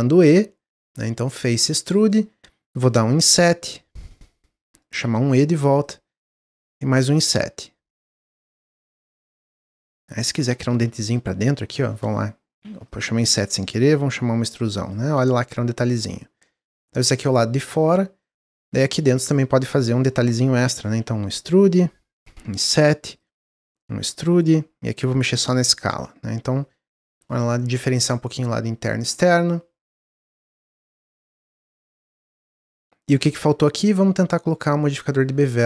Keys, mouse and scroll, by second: 0.7-2.0 drag, 2.0 middle click, 3.0 i, 4.3 middle click, 5.0 e, 6.2 middle click, 6.8 i, 9.0-11.0 middle drag, 13.3 ctrl+z, 14.0 e, 15.0 Tab, 15.3-16.2 middle drag, 16.2-16.5 scroll down 2, 16.5-17.2 middle drag, 17.2 click, 17.8-18.3 middle drag, 18.3-18.6 scroll up 3, 18.6 Tab, 18.8-21.1 drag, 21.1 e, 22.2 i, 23.5 e, 24.9 s, 25.9 Tab, 26.0-26.7 middle drag, 26.7-27.0 scroll down 1, 27.0-29.0 middle drag, 29.0-29.5 scroll down 2, 29.8-30.2 drag, 30.2-31.9 middle drag, 31.9 scroll up 1, 32.4 click, 33.7 drag, 35.0 click.